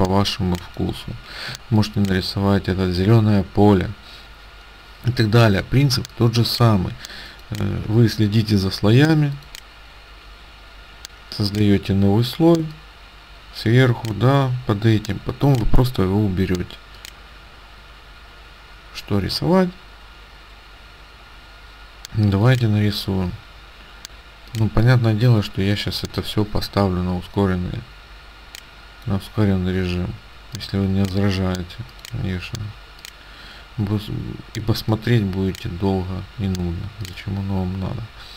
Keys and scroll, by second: 1.6 space, 6.0 space.